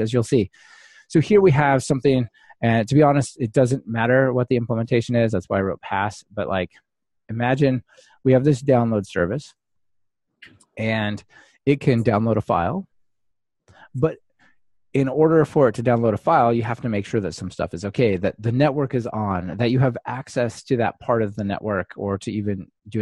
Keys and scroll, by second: 5.9 super+F8.